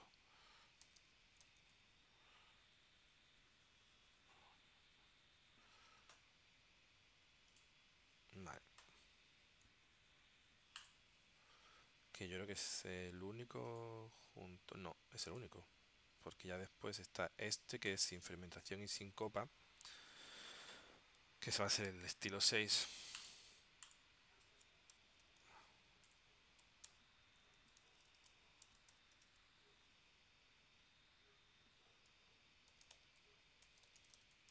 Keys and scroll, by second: 0.5-2.3 typing, 3.9 Tab, 25.1-29.6 typing, 32.6-34.5 typing.